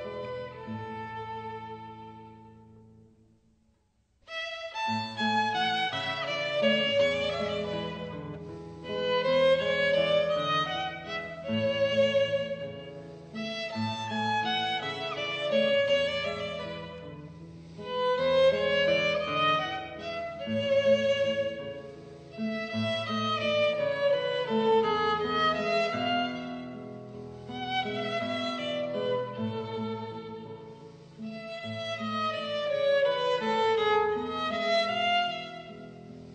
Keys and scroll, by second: 0.0 super+z, 3.6 super+z, 9.5 super+z, 13.1 b.